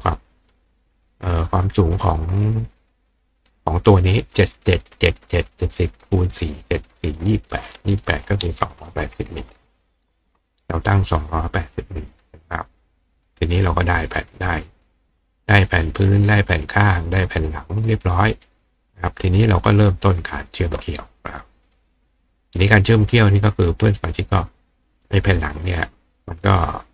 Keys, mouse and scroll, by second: 7.1 click, 10.9 click, 11.7 click, 12.1 right click, 13.2 click, 14.4 click, 16.4 click, 17.6 click, 19.1-20.2 drag, 20.5 click, 21.3 click, 21.7 right click, 25.4 click.